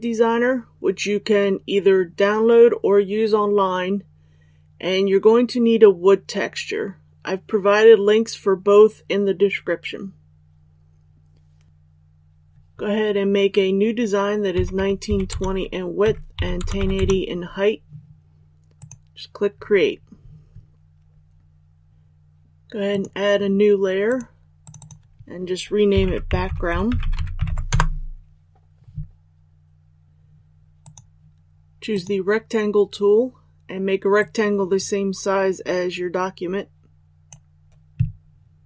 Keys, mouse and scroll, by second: 11.7 Delete, 18.7 click, 27.7 Return, 30.8-38.6 drag.